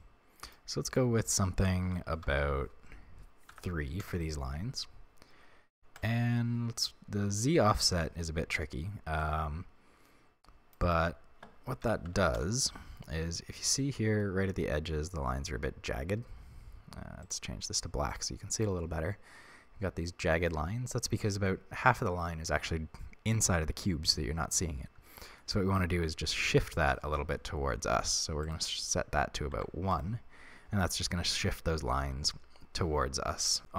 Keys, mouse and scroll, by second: 0.0-8.6 drag, 4.1 Return, 8.6 right click, 9.2-13.8 drag, 12.4 Return, 13.2-13.8 scroll up 2, 13.8-17.3 shift+middle drag, 14.4 scroll up 2, 17.3-20.6 drag, 20.8-21.3 scroll down 2, 21.3-28.5 shift+middle drag, 28.5-30.0 drag.